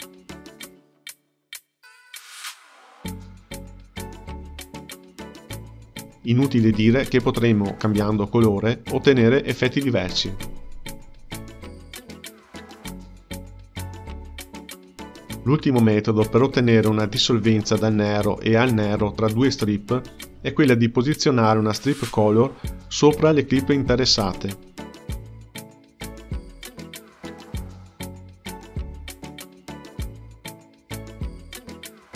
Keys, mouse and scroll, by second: 0.0 shift+a, 1.0 space, 2.5 space, 3.2 click, 3.8 space, 4.9 space, 5.8 click, 7.4 click, 11.5-12.0 drag, 12.0 space, 13.8 space, 17.1-18.6 drag, 20.2 Page_Up, 21.6-22.7 drag, 24.4 shift+a, 28.1 click, 29.0-32.0 drag.